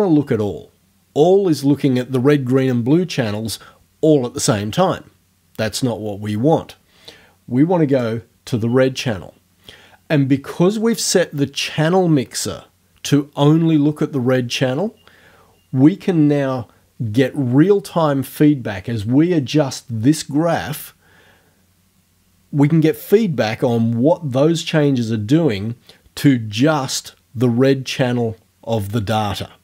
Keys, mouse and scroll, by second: 7.9 click.